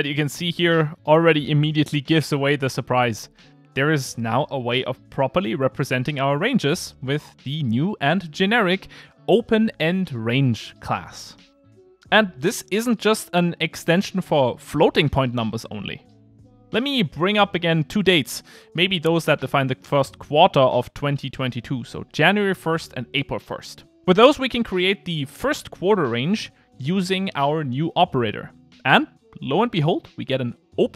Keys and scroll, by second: 5.3 Return, 6.2 Return, 6.3 ctrl+r, 13.8 Return, 17.8 Return.